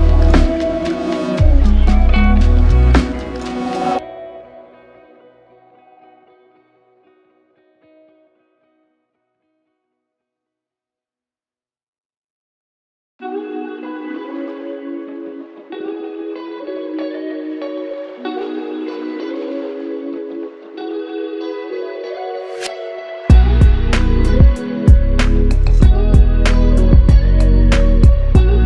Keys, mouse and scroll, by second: 1.2 shift+click, 2.1 shift+click, 4.8 alt+click, 9.1 typing, 9.1 double click, 18.1 alt+click, 20.5 alt+click, 23.5 alt+click, 26.7 shift+click, 28.5 f.